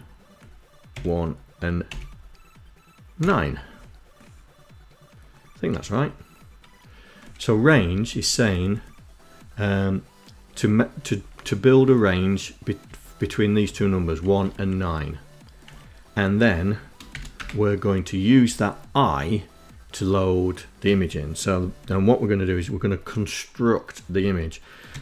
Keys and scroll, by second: 0.3 1, 1.2 ,, 2.5 9, 5.0 Right, 6.7 Left, 7.0 Left, 7.3 Left, 7.4 Left, 7.6 Left, 7.7 Left, 7.9 Left, 8.1 Left, 8.8 Left, 10.2 Right, 10.4 Right, 10.6 Right, 11.1 Left, 12.1 Right, 12.5 Right, 12.9 Left, 13.3 Left, 13.5 Right, 13.8 Right, 15.0 Right, 16.4 shift+;, 16.6 Return, 23.9-25.0 typing.